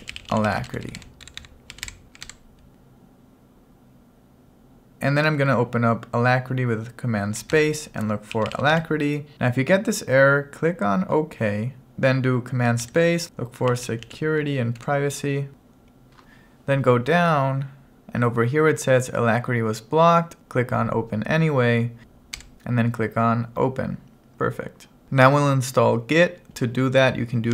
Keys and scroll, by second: 0.0-2.5 typing, 7.6 super+space, 12.9 super+space, 14.9 Return, 27.3-27.5 typing.